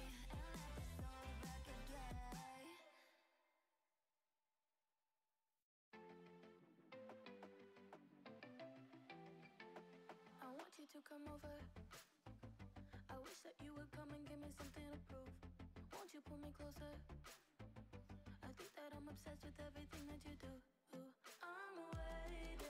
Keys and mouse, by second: 0.0-1.0 typing, 4.9 p, 6.8 click, 7.8 Tab, 8.2 click, 9.7 h, 10.2 click, 11.5 Tab, 11.9 click, 12.5 l, 13.2 l, 14.6 p, 15.6 Tab, 16.0 click, 17.6 alt+h, 18.3 click, 18.9 click, 20.2 shift+click, 21.2 ctrl+j, 21.9 click.